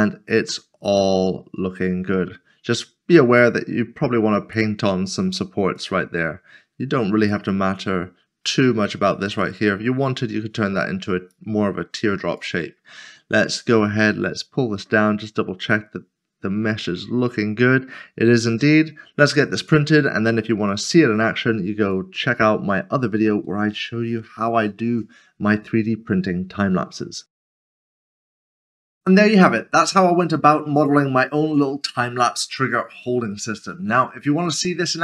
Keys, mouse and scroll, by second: 0.2 click, 1.5 click, 5.8 click, 11.3 click, 14.4 click, 22.3 scroll down 1.